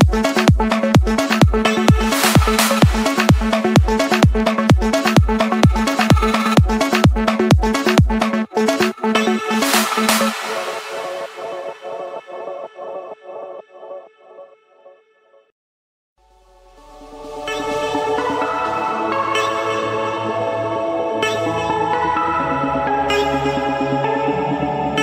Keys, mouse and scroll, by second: 1.1-2.2 typing, 4.0-5.1 drag, 4.6 Escape, 5.9 click, 7.3-8.1 scroll, 8.4 click, 9.3 click, 10.7 click, 10.9-13.0 scroll, 13.9 click, 15.1 click, 15.5 Escape, 16.2 click, 17.9 scroll up 1, 18.7-19.8 scroll up 7, 20.7 scroll, 21.1-23.4 typing, 22.5 Return, 23.7 Escape, 24.8 click.